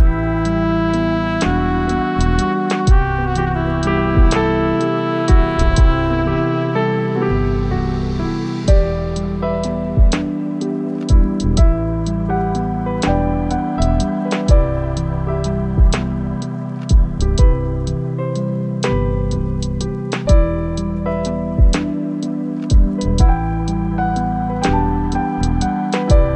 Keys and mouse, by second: 1.4-2.9 drag, 3.6-5.9 drag, 6.7-8.1 drag, 8.7 click, 9.7 click, 10.6 click, 13.0-15.2 drag, 16.7-17.9 drag, 18.8-19.9 drag, 20.6-21.8 drag, 24.3 click, 25.0-25.5 drag.